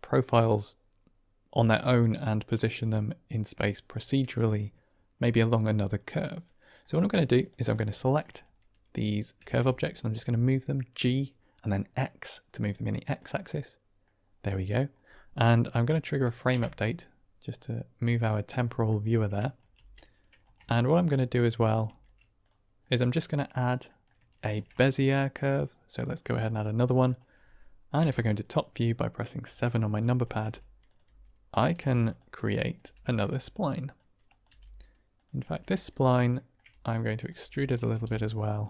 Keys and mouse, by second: 6.7-7.1 middle drag, 7.1 click, 7.4 drag, 7.8 shift+drag, 9.3 g, 9.4 x, 13.0 click, 13.6 middle click, 16.5 Right, 18.6 middle drag, 19.7 ctrl+space, 20.7 shift+middle drag, 21.8 shift+s, 22.8-23.3 middle drag, 23.8 middle drag, 24.3 shift+a, 26.5 middle click, 27.9 KP_7, 29.3 Tab, 30.1 click, 30.3 g, 30.8 click, 30.9 s, 31.4 click, 31.6 r, 32.0 click, 32.3 click, 32.7 r, 32.9 click, 33.2 s, 33.7 click, 34.3 click, 34.4 g, 35.0 click, 35.3 r, 35.6 click, 36.3 shift+middle click, 36.6 e, 37.1 click, 37.3 r, 37.6 click, 37.8 g, 38.4 click.